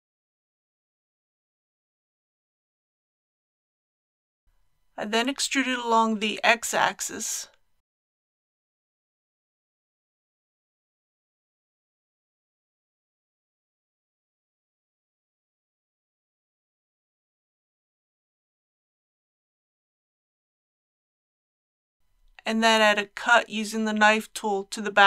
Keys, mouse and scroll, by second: 6.4 click, 7.7 KP_7, 8.8 shift+middle click, 11.2-11.6 typing, 16.4 shift+click, 21.1 KP_1, 23.2 scroll up 1.